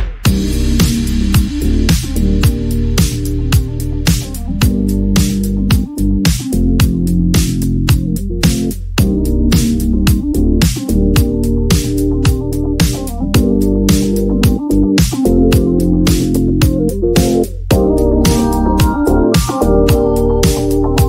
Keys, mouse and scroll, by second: 5.0 click, 8.8-10.7 drag, 15.9-19.1 ctrl+drag, 19.9 click.